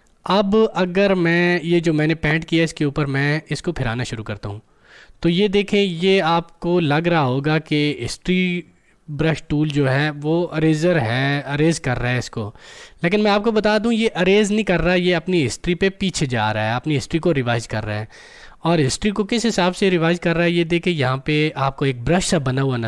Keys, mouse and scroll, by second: 3.8-15.0 drag.